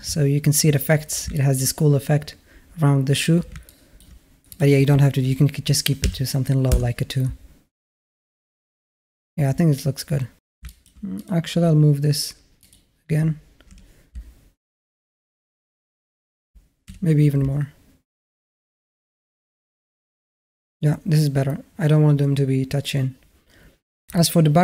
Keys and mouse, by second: 1.1 shift+a, 1.2 middle drag, 3.5 alt+shift+click, 3.5 alt+shift+right click, 4.4-6.5 drag, 10.5 alt+shift+drag, 11.1 drag, 12.5 click, 13.5 g, 16.7 g, 24.0-24.5 alt+drag.